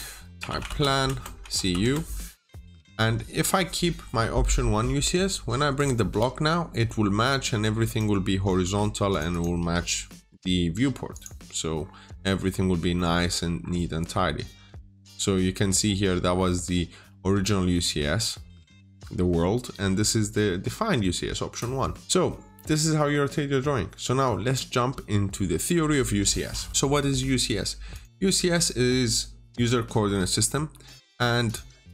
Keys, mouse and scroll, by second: 0.3-1.4 typing, 1.3 Return, 1.7 Return, 2.8-3.2 scroll up 1, 5.6 click, 6.0-6.4 scroll up 1, 6.7 middle click, 6.9 scroll down 1, 7.7 click, 8.3 Escape, 9.0 click, 9.2 double click, 9.5 Delete, 9.8 scroll down 1, 10.0 middle click, 11.0 click, 11.7-12.0 scroll up 1, 12.4-12.8 scroll down 1, 12.8 middle click, 13.1-13.5 scroll down 1, 13.5-13.8 scroll up 1, 14.5 scroll down 1, 15.0 scroll up 1, 17.1 scroll down 1, 17.3 middle click, 21.2 scroll down 1, 22.0 double click, 22.2-24.4 scroll down 1, 26.7 middle click, 27.8 click, 30.5 scroll down 1, 30.7 middle click, 31.3 click.